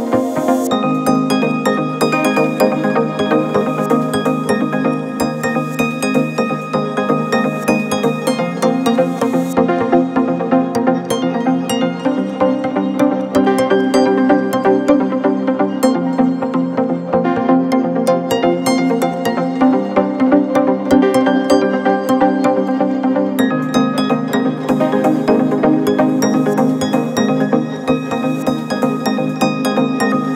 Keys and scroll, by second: 4.2 Delete, 5.1 2, 10.1 ctrl+z, 13.0 ,, 17.7 ., 18.4 ,.